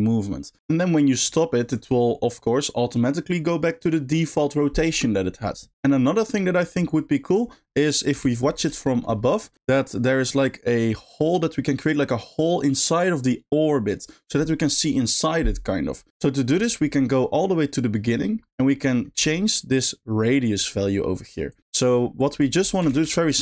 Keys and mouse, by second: 5.7 space, 8.9 shift+middle drag, 17.1 middle click, 18.3 middle click, 19.0 middle click, 21.5 click, 21.8 g, 22.3 click, 22.9 shift+a.